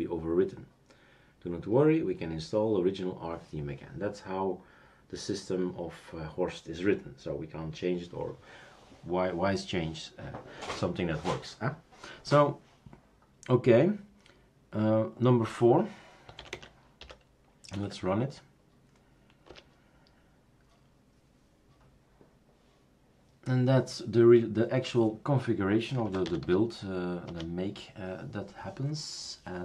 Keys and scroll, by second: 16.4-17.7 typing, 19.5 Return, 25.7-27.5 typing, 27.5 Return.